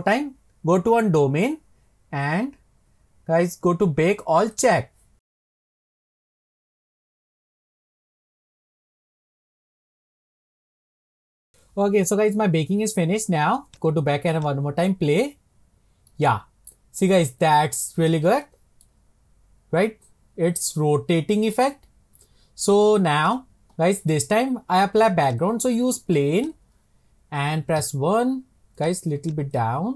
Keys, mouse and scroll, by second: 1.8-3.7 scroll down 22, 4.5-11.2 drag, 13.7-16.2 drag, 16.2-17.6 middle drag, 17.6-17.9 scroll up 1, 18.6-21.9 shift+middle drag, 23.3-26.5 drag, 29.2 click, 29.5 click.